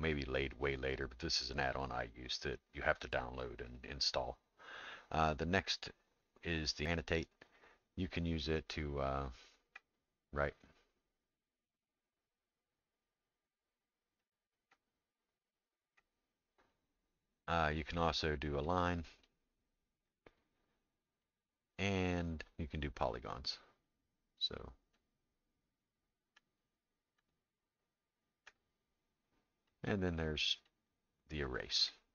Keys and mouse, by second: 9.1 click, 14.2 click, 15.6 click, 16.9-18.7 drag, 19.2-20.3 drag, 21.2-23.1 drag, 23.8 click, 30.7-31.9 drag.